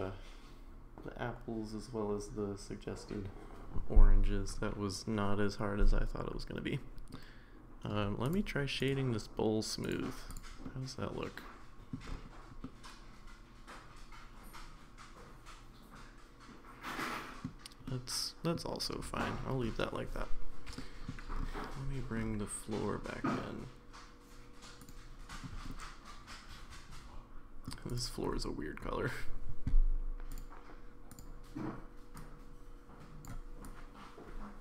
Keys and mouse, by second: 7.1-7.9 middle drag, 8.9-9.9 right drag, 10.7-11.9 middle drag, 12.6-17.4 middle drag, 17.9-18.5 middle drag, 20.8 middle drag, 24.8 click, 25.7-27.7 middle drag, 27.9 click.